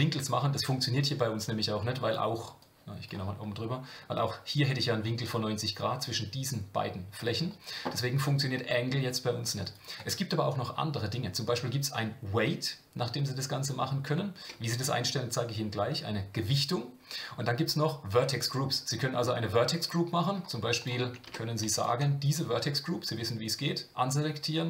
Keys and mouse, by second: 2.6 click, 9.6 click, 10.0-20.3 drag, 20.8 click, 21.3 Tab, 21.8 alt+click.